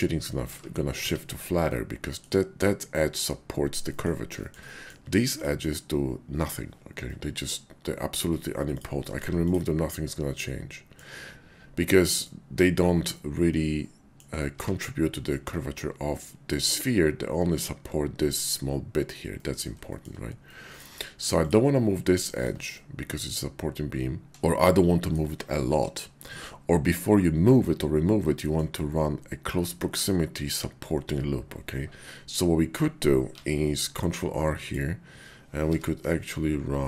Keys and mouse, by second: 1.0 ctrl+z, 1.7 middle click, 4.0 middle click, 4.4 shift+click, 4.6 middle click, 7.1 middle click, 9.9-11.0 middle drag, 9.9 x, 12.0 middle click, 13.1-14.2 middle drag, 14.5 ctrl+z, 19.4 middle click, 19.9 shift+click, 20.5 middle click, 21.3 click, 22.7-25.1 middle drag, 28.2 middle click, 33.3 ctrl+r, 35.5 k.